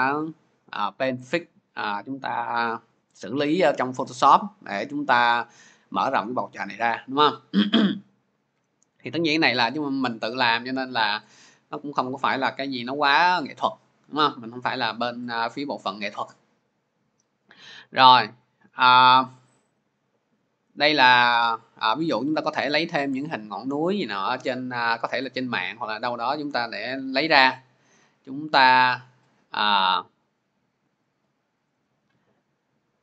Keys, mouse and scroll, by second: 11.7 click, 12.3 click, 12.9 click, 13.9 click, 14.5 click, 17.6 click, 17.8 click, 18.8-19.6 scroll, 28.1 click, 28.6 click, 28.8 click, 29.4 click, 30.0 click, 30.2 click, 30.8 click, 31.0 click, 31.5 click, 31.7 click, 32.3-32.8 scroll.